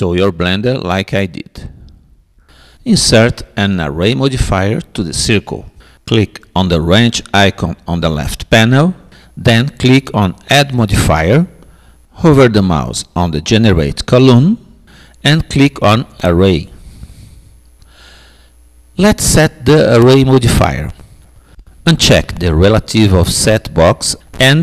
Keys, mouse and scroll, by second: 7.4-9.0 drag, 10.6-12.4 drag, 12.6-14.4 drag, 23.6-24.6 drag.